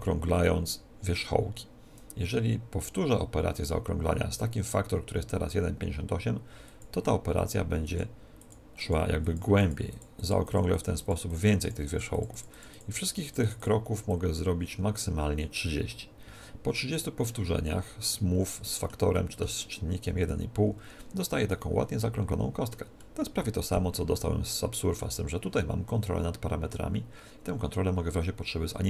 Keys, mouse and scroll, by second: 18.1-20.8 middle drag, 21.4-25.9 middle drag.